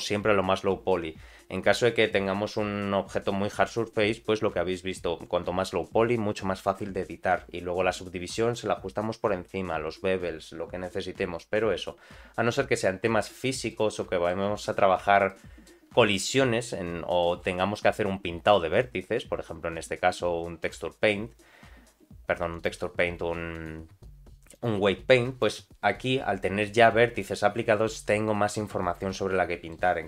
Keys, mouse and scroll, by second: 13.7 middle click, 14.9 Tab, 15.3 middle click, 16.0 click, 17.2 middle click, 17.7-18.7 scroll up 1, 18.7-20.9 drag, 22.5 click, 23.5-24.7 drag, 25.4-29.3 drag, 29.3 middle click.